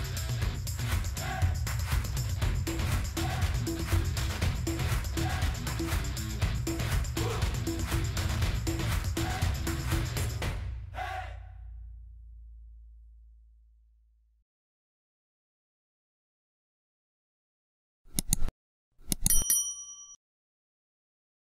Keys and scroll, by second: 1.9 ctrl+v.